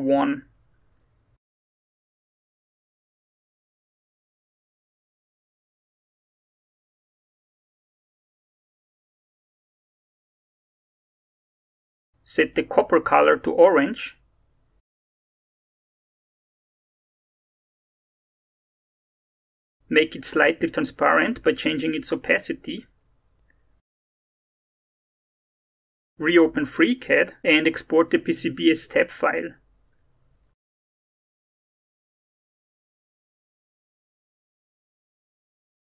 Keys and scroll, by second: 1.1-2.4 typing, 2.6 Tab, 3.6 shift+Tab, 3.9-7.2 typing, 8.4 alt+Tab, 19.9 alt+Tab, 22.9-23.9 typing, 29.0 ctrl+e, 31.2-32.1 typing, 32.3 Return.